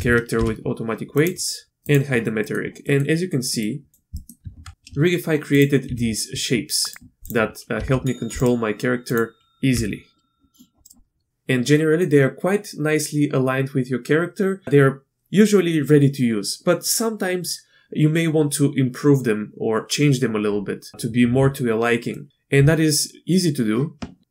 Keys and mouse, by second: 0.3 ctrl+p, 1.8 click, 2.8 click, 3.5 click, 4.2 click, 4.4 Tab, 5.9 r, 7.2 click, 7.7 r, 9.1 click, 9.7 g, 22.2 click, 22.3 Tab.